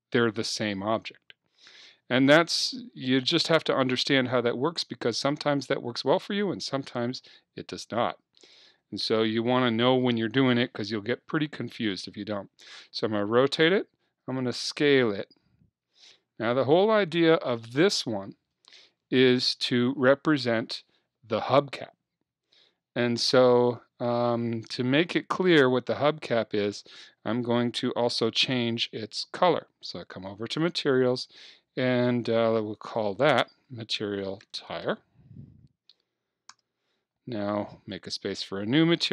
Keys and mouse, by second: 4.0 r, 9.3-10.4 drag, 14.1 s, 16.7-18.7 drag, 25.2-30.6 middle drag, 30.6-34.7 drag, 38.0-39.1 drag.